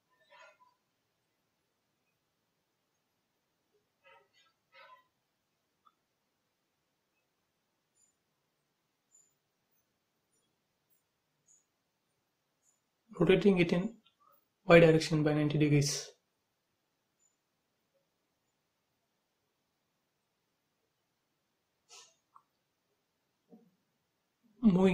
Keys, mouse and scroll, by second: 4.1 click, 4.2 space, 4.4-5.8 scroll down 1, 5.8 click, 6.9 m, 7.8 ctrl+click, 9.8 space, 10.1 scroll up 1, 10.9 q, 12.0 click, 13.2-14.2 typing, 15.5 m, 16.3 click, 17.3 space, 18.1 m, 18.2 click, 20.6 space, 21.2 m, 21.3 click, 22.4 Up, 23.5 click, 23.7 space, 24.1 scroll down 1, 24.4-24.9 middle drag.